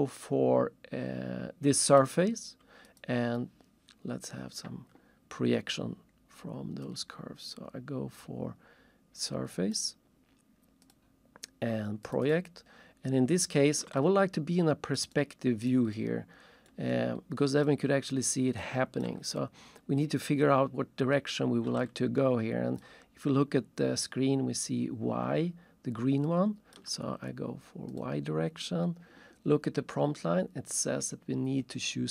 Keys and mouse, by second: 6.9 click, 9.8 click, 12.0 click, 14.0 alt+shift+click, 15.1 alt+shift+right click, 15.9 alt+shift+middle click, 16.9 alt+shift+click, 18.6 alt+shift+click, 21.8 alt+shift+click, 26.3 alt+shift+click.